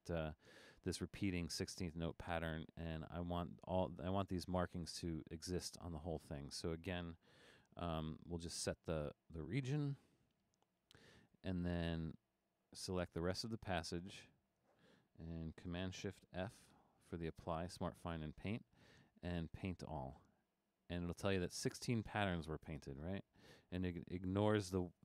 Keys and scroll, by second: 7.6 super+f, 10.3 super+f, 16.7 shift+super+f.